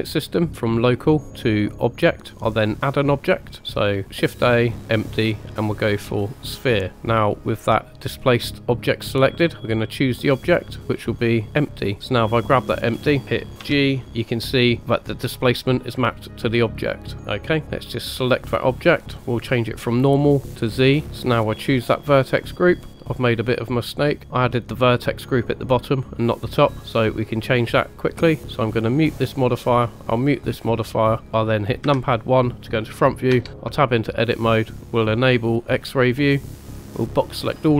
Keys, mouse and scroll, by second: 0.9-1.8 drag, 6.9 click, 10.7 click, 12.2 click, 13.2 right click, 13.6 g, 17.2 right click, 17.9 click, 19.4-20.5 drag, 21.7-22.8 drag, 22.9-23.7 middle drag, 22.9 scroll up 2, 28.0 click, 29.1 click, 30.1 click, 30.8-31.5 middle drag, 31.2 KP_1, 31.8 KP_1, 33.3 Tab, 34.8 click, 36.4-37.5 drag.